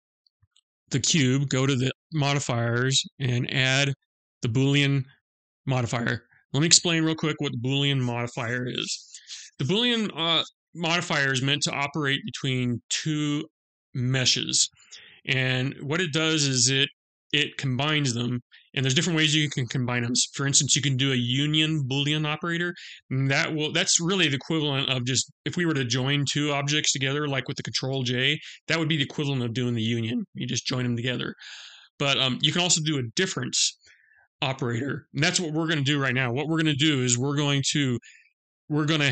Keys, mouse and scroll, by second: 0.9 click.